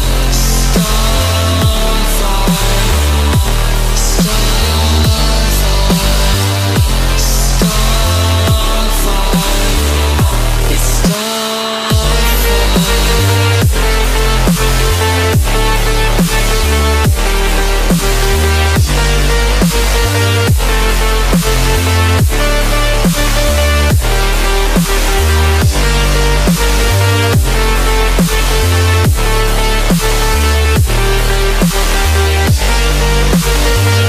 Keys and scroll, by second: 27.1 ctrl+v.